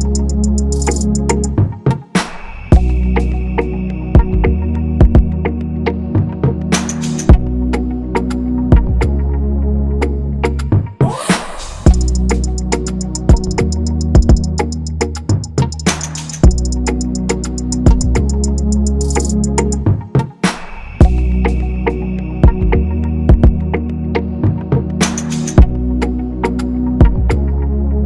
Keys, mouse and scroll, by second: 2.9 double click, 10.8 typing, 20.5 double click, 22.1 double click, 25.0 ctrl+z.